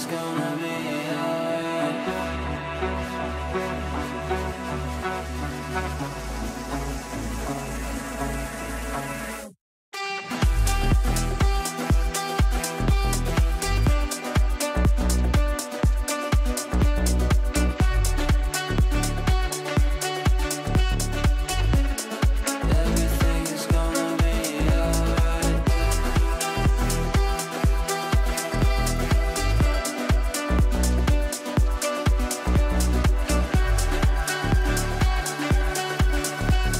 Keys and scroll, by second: 12.5 ctrl+z, 13.3 shift+Page_Down, 16.5 ctrl+z.